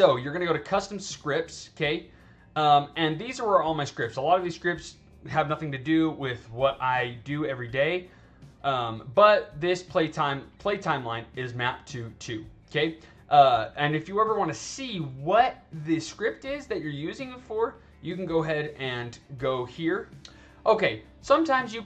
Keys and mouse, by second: 0.7 click, 10.2 click, 17.6 click.